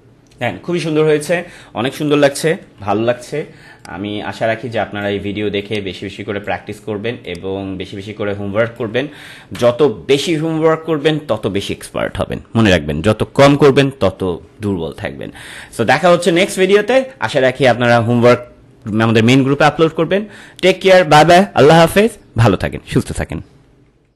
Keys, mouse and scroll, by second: 0.8 ctrl+-, 2.6 c, 3.8-7.2 alt+shift+drag, 7.2-11.1 alt+shift+drag.